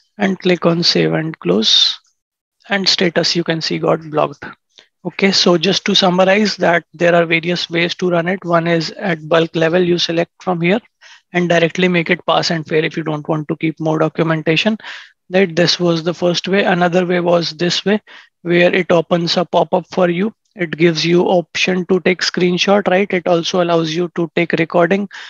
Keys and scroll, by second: 5.3 ctrl+shift+#.